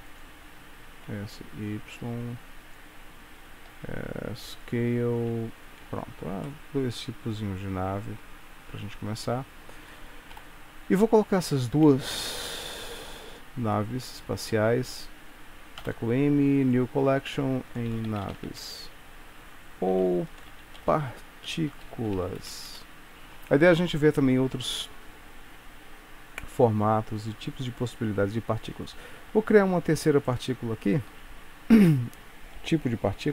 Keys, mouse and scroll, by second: 1.0 s, 3.8 s, 5.3 e, 6.0 Tab, 6.5 middle click, 9.0-9.8 scroll down 7, 10.4-10.9 scroll down 1, 11.4 click, 12.3 g, 13.8 click, 15.9 m, 22.8 Return, 30.4 shift+right click, 31.2 shift+a.